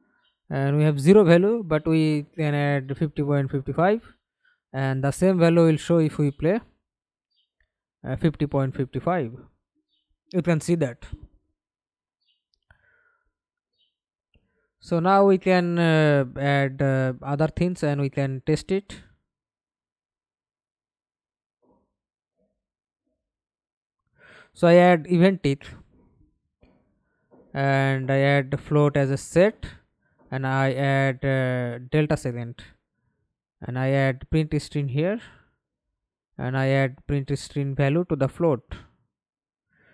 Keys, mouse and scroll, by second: 0.4-1.8 typing, 3.6 double click, 4.0 double click, 4.4 middle click, 5.2 F11, 5.6 alt+p, 8.2 Escape, 8.7 middle click, 9.4 F11, 14.3 Delete, 15.9 ctrl+z, 21.5 right click, 22.1 right click, 22.7-24.6 typing, 24.6 Return, 26.4 double click, 32.7-34.1 typing, 34.2 Return, 39.4 right click.